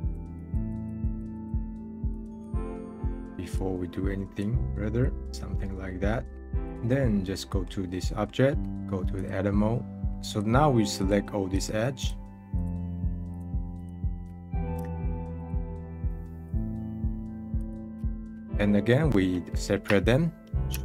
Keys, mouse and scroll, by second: 5.3 middle click, 6.2 scroll down 1, 6.3-7.5 drag, 7.5-8.5 middle drag, 9.1-10.1 drag, 14.4-15.4 middle drag, 15.4-18.0 alt+shift+drag, 18.0 scroll down 1, 18.2 scroll up 3, 20.7 shift+d.